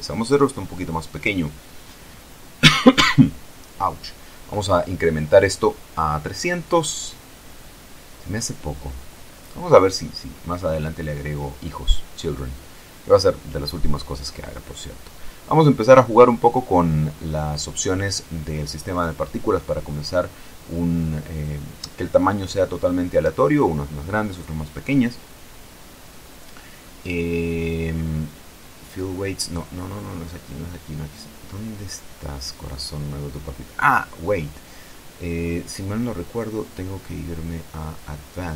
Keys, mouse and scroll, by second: 0.4 click, 1.4 click, 3.4-4.6 scroll up 2, 4.6 click, 5.5 KP_3, 5.7 KP_0, 6.1 KP_Enter, 7.3-9.1 drag, 9.9-10.6 scroll down 2, 14.0-16.2 drag, 22.4 click, 23.2-24.6 scroll down 3, 25.9 click, 29.0 click, 30.2 click, 33.4-33.9 scroll up 2, 34.2 scroll up 2, 36.3-38.5 scroll up 3.